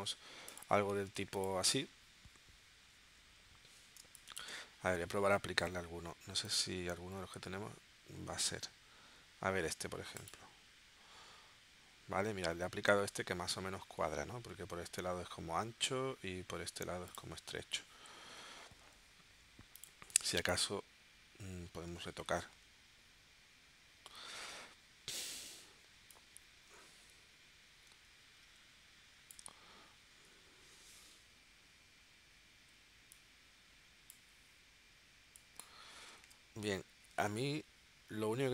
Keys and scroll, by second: 4.2 space, 22.1 shift+w, 36.2 super+z.